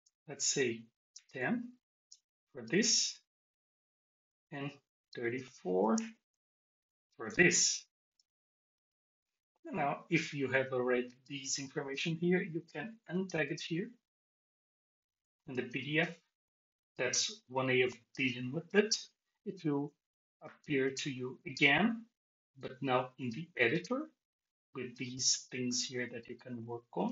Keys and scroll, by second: 5.9 alt+shift+x.